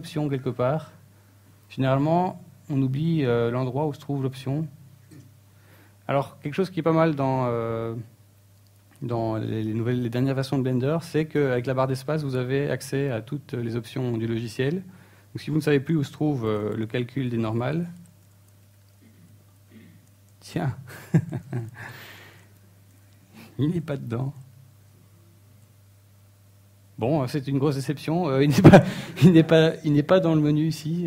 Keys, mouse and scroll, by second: 2.6 click, 16.4 space.